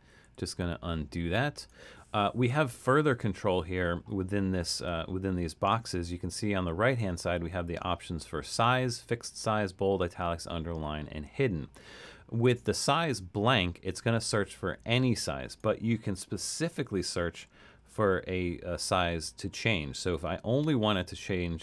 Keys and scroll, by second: 0.3 super+z, 16.8-17.4 typing.